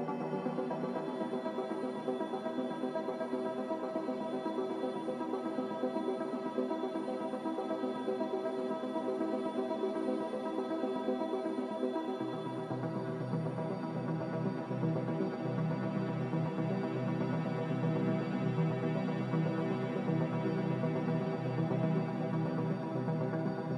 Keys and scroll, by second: 5.6 5, 6.1 1, 6.2 Return, 16.3 z.